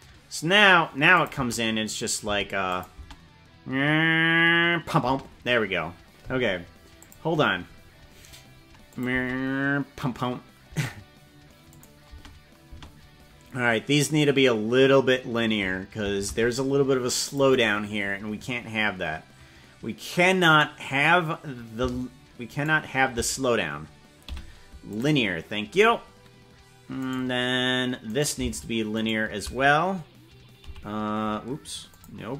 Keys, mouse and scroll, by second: 1.1 click, 1.3 space, 2.3 space, 2.7 click, 2.9 space, 5.1 space, 7.0 click, 8.9 click, 9.1 space, 10.7 space, 11.7 click, 12.2 space, 12.8 space, 16.2 ctrl+Tab, 17.3 click, 20.6 right click, 22.6 shift+right click, 24.4 t, 27.2 right click, 28.2 right click, 29.0 shift+right click, 30.8 t, 31.9 click.